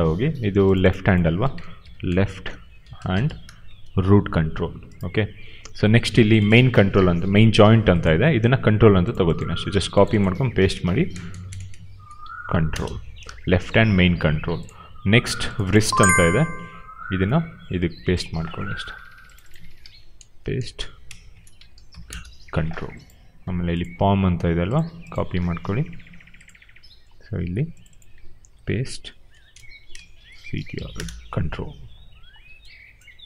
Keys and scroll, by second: 1.7-4.1 typing, 7.4 ctrl+c, 10.4 ctrl+v, 11.0-12.9 typing, 14.2 q, 16.1 ctrl+c, 19.8 ctrl+v, 20.3-22.3 typing, 25.6 ctrl+c, 28.5 ctrl+v, 29.1-31.1 typing.